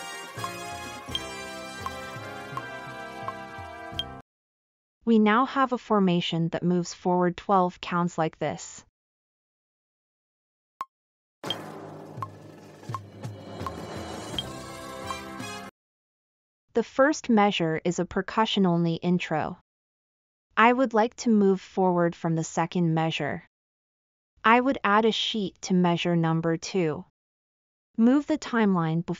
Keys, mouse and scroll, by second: 9.4 click.